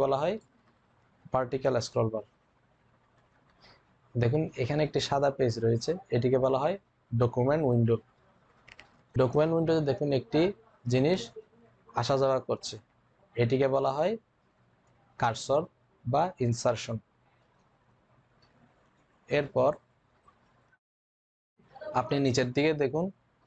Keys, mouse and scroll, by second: 1.8-2.6 typing.